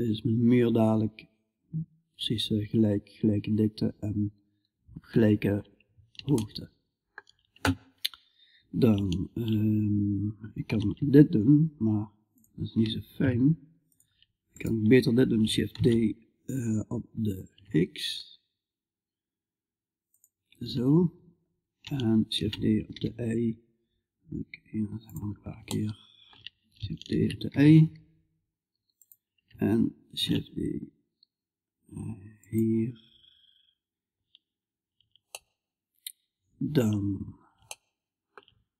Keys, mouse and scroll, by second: 5.8-10.2 middle drag, 10.2 shift+d, 14.0-15.2 right drag, 15.2 shift+d, 15.2-19.5 drag, 21.8 shift+d, 25.1-26.6 middle drag, 29.6 shift+d, 34.8-37.3 middle drag.